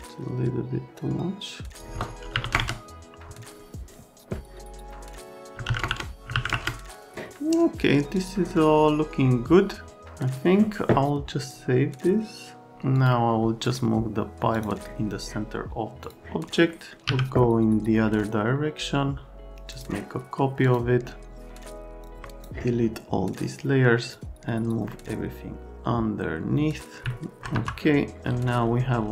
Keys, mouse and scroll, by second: 2.3 KP_Decimal, 2.4 KP_5, 2.5 KP_Enter, 5.5-6.5 typing, 5.8 KP_Enter, 6.5 KP_Enter, 10.0 right click, 11.4 middle click, 12.9 middle click, 13.6 middle click, 14.5 middle click, 16.0 middle click, 16.6 right click, 19.7 click, 20.6 click, 22.0 click, 22.2 scroll up 1, 22.4 click, 24.1 click, 27.1 alt+middle click.